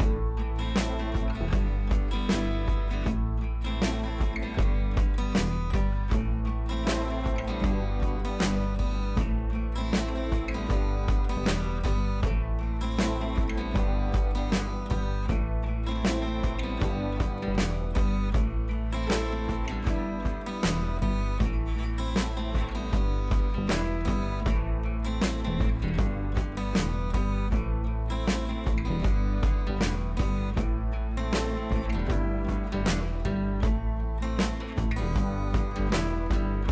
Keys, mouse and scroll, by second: 3.5-6.3 shift+drag, 6.6-11.6 drag, 11.6 ctrl+t, 12.3-13.7 alt+drag, 13.7-18.0 shift+drag, 18.0 ctrl+a, 18.6 click, 19.3 ctrl+d, 19.7 click, 19.9 Up, 20.9 click, 21.7 ctrl+t, 22.4 click, 22.8 ctrl+t, 23.4 click, 24.1-26.5 alt+drag, 26.5-28.6 alt+drag, 30.5 click, 31.1 ctrl+t, 31.7 BackSpace, 33.3 Up, 33.7 Left, 33.9 Up, 34.1 Left, 35.4 Up, 36.5-36.7 drag.